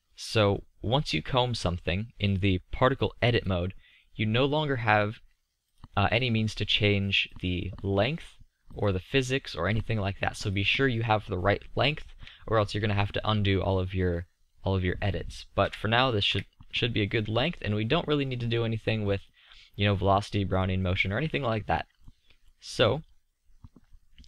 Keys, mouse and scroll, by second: 4.2-5.7 middle drag, 15.5 KP_3, 16.3 KP_5, 22.0-22.9 middle drag.